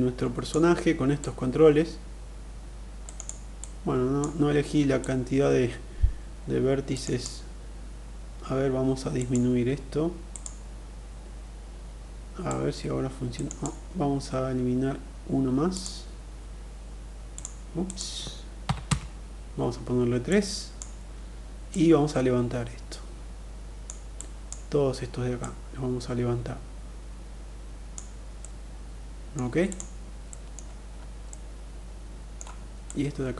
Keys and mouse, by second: 0.6-2.5 drag, 2.5 middle click, 2.6 click, 3.1 click, 4.4-6.4 drag, 6.4 middle click, 6.5 click, 8.5 click, 9.8 click, 11.8-13.0 drag, 15.3-19.1 drag, 19.8 click, 21.1-23.3 drag, 23.7 click, 24.9-27.3 drag, 27.9 middle click, 29.7 middle click, 30.7-31.9 middle drag, 32.4 click.